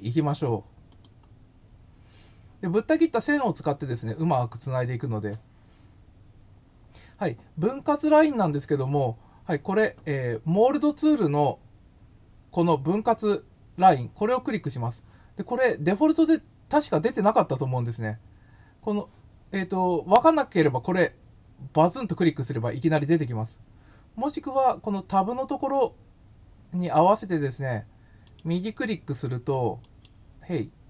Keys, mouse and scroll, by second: 0.9 click, 29.8 right click.